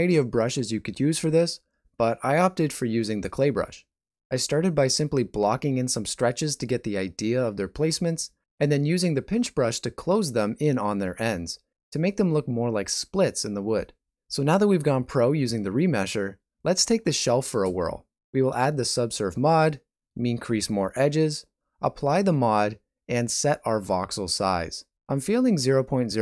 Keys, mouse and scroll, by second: 0.0 click, 0.3 click, 0.6 middle click, 0.9 shift+middle click, 1.1 middle click, 1.5 shift+middle click, 1.7 middle click, 2.0 middle click, 2.6 ctrl+middle click, 2.8 middle click, 3.5 click, 3.8 click, 4.1 click, 4.4 click, 4.8 click, 5.1 middle click, 5.6 shift+middle click, 5.6 shift+middle click, 5.7 middle click, 6.1 shift+middle click, 6.3 middle click, 6.6 shift+middle click, 6.8 middle click, 7.2 ctrl+middle click, 7.3 middle click, 7.8 middle click, 8.4 click, 8.8 click, 9.6 click, 10.1 click, 10.3 middle click, 10.6 shift+middle click, 11.0 middle click, 11.3 click, 12.1 click, 13.0 middle click, 13.3 click, 14.0 click, 14.3 click, 15.2 click, 15.7 ctrl+middle click, 16.1 middle click, 16.7 middle click, 17.2 shift+middle click, 17.5 ctrl+middle click, 17.7 shift+middle click, 18.1 alt+z, 18.1 n, 18.7 click, 22.1 Tab, 22.6 ctrl+a.